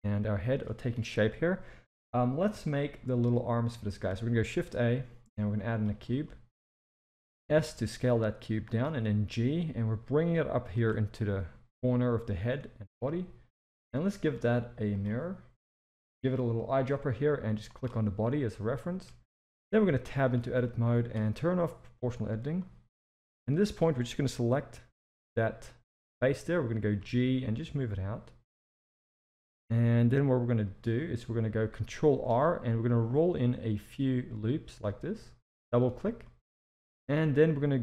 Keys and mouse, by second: 1.1 KP_1, 2.6-3.0 shift+middle drag, 3.8 shift+middle drag, 4.5 shift+a, 6.2 shift+middle drag, 7.5 s, 8.8 g, 14.2 click, 18.8 shift+middle drag, 19.5 Tab, 19.8 z, 20.6-21.1 drag, 21.8 click, 22.6-25.1 drag, 27.0 g, 32.1 ctrl+r, 36.2 middle click.